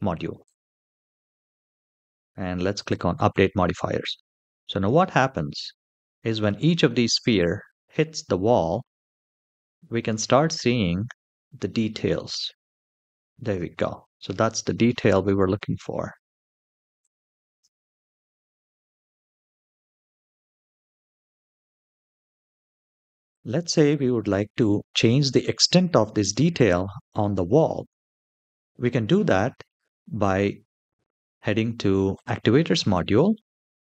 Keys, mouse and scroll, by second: 2.4 click, 4.4 shift+middle drag, 4.8-5.5 scroll down 3, 5.8-6.2 shift+middle drag, 6.6 middle click, 7.3-7.6 shift+middle drag, 7.7 scroll up 1, 9.9-10.4 scroll up 1, 12.0 space, 13.1 space, 16.7 click, 17.3 space, 23.0 space, 23.3 click, 31.9 click.